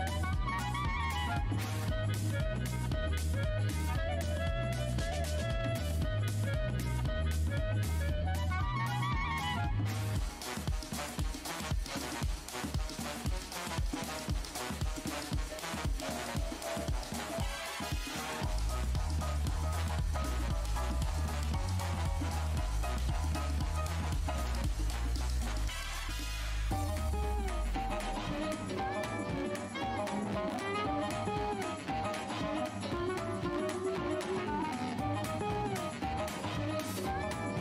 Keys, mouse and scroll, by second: 0.1 shift+click, 0.5-1.1 alt+scroll up 1, 0.5 w, 2.6 w, 3.4 click, 3.6-4.1 scroll down 1, 4.2 scroll down 1, 4.7 alt+shift+w, 5.7 alt+click, 6.1-6.8 scroll down 2, 6.8-8.0 scroll up 1, 8.6 click, 9.1-9.7 scroll up 1, 9.1 w, 11.1-11.8 typing, 11.9 click, 13.2-15.5 typing, 16.0 click, 17.7 w, 19.3 alt+click, 20.0-20.5 alt+scroll up 1, 22.5 click, 25.9 alt+click, 26.4 scroll down 1, 27.4 alt+click, 29.6 click, 31.8 click, 32.4 w, 33.0 shift+right click, 33.6 alt+click, 34.1 alt+scroll up 1, 34.5 alt+w, 35.3 alt+shift+w, 35.8 v, 36.6 r.